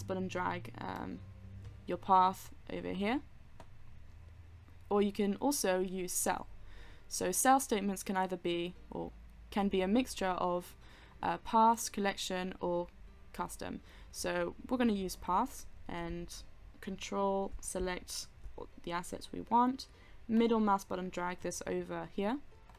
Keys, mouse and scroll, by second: 20.8-22.5 middle drag.